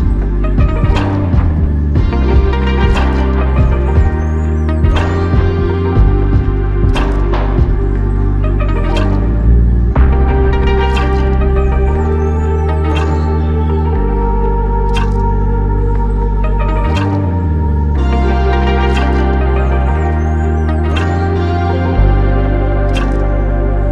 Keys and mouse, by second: 8.6 double click.